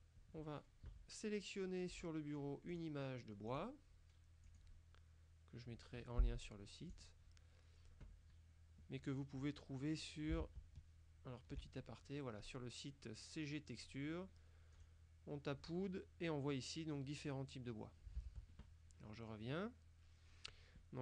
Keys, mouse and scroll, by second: 2.0 click, 2.8 click, 3.6 click, 4.5 click, 7.0 click, 10.5 alt+Tab, 14.9 click, 18.6 alt+Tab.